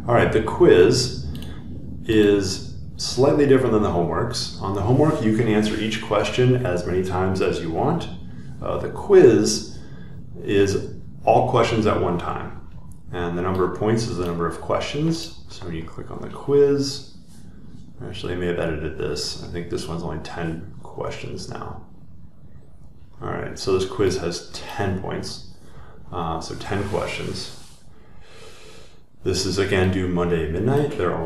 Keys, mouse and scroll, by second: 0.5 click, 1.4 scroll down 1, 1.6 scroll, 1.7 scroll down 1, 2.2 click, 3.4 click, 15.2-17.3 drag.